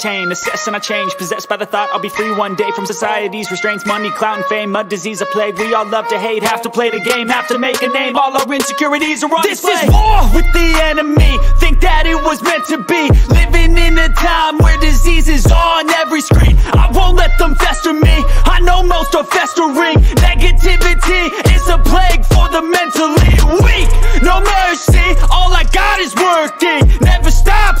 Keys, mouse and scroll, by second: 0.8 ctrl+=, 1.7 g, 3.8 click, 5.3 ctrl+z, 6.0 b, 8.8 shift+click, 12.0-13.4 drag, 19.4 click, 21.1 b, 21.6 ctrl+=, 22.7 click, 23.1 ctrl+z, 23.5 click, 23.9 e, 24.3-25.4 drag, 25.9-27.0 drag, 27.3 b.